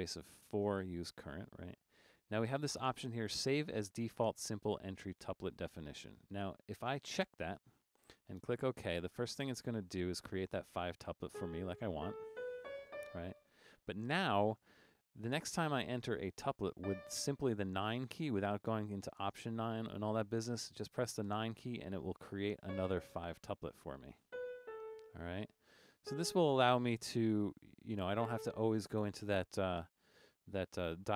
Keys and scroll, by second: 0.8 4, 11.3-14.1 typing, 16.9 d, 21.4 9, 22.4-26.1 typing, 28.2 a, 29.5-30.3 typing.